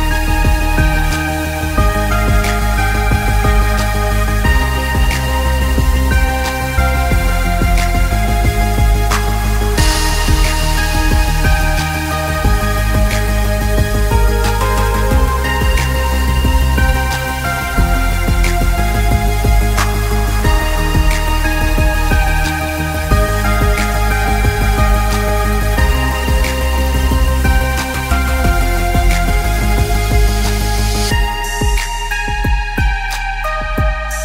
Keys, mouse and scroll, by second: 6.3 click, 7.0 scroll down 1, 8.0 click, 12.6 click, 14.9 shift+click, 21.5 click, 28.6 shift+click, 31.7 shift+click.